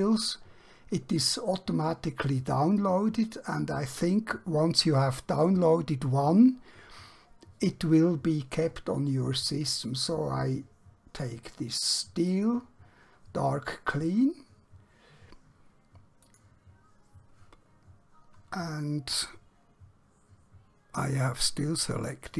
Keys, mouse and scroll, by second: 12.4 click, 16.3 click.